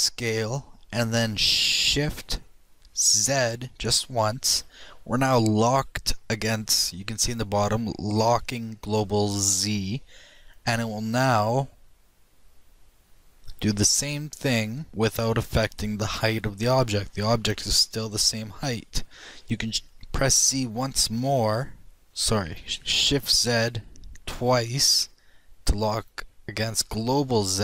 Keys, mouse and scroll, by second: 0.2 s.